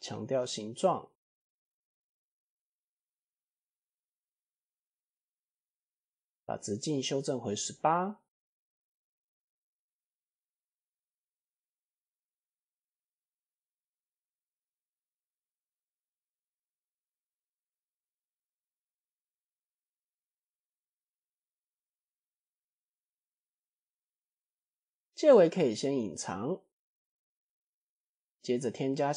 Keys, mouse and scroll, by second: 1.5 Tab, 2.0-2.6 middle drag, 3.2 click, 3.7-4.0 middle drag, 4.3 click, 5.0-5.6 scroll up 3, 5.4-5.8 middle drag, 7.0-9.1 shift+drag, 9.5-9.9 middle drag, 9.9-10.3 scroll down 2, 10.3 click, 11.3 click, 12.4 ctrl+a, 14.4 KP_1, 15.2 click, 15.7 s, 18.4 click, 19.2 s, 20.8 click, 21.2-23.0 middle drag, 24.4 KP_1, 25.5 click, 26.9 click, 27.6 click, 27.9-28.5 middle drag.